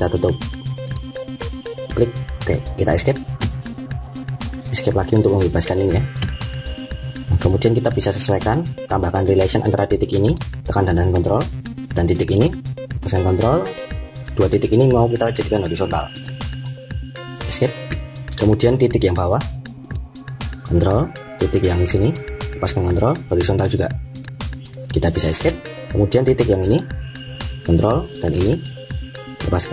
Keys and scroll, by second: 2.8 Escape, 4.8 Escape, 17.3 Escape, 25.2 Escape.